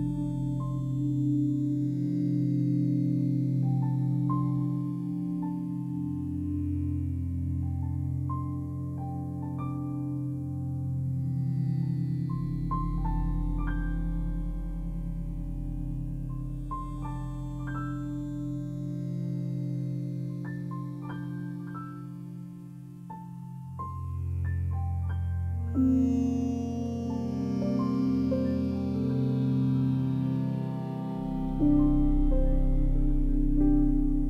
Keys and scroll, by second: 4.6 Escape.